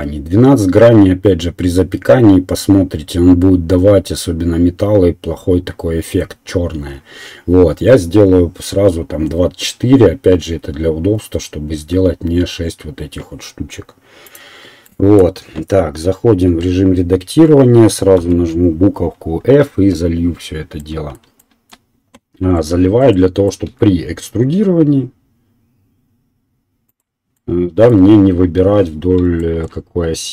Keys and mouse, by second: 15.2-22.4 right drag, 16.5 Tab, 18.1 f, 19.7 KP_1, 23.6 e, 25.2-27.2 right drag, 27.2-30.3 middle drag.